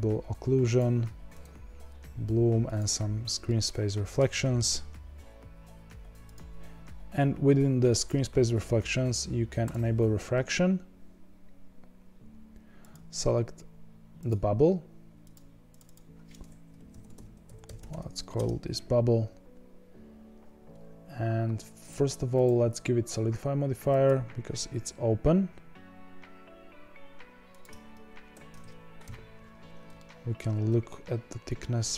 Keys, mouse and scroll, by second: 0.6 click, 2.6 click, 3.4-6.2 middle drag, 6.2 click, 6.3 click, 9.6 click, 12.9 click, 15.3 click, 15.6 click, 15.8 click, 18.3 b, 20.4-21.7 scroll down 5, 24.0-27.6 drag, 27.8 z, 29.0 KP_1, 29.5-29.9 scroll up 7, 29.9-30.5 shift+middle drag, 30.5-31.7 scroll up 4.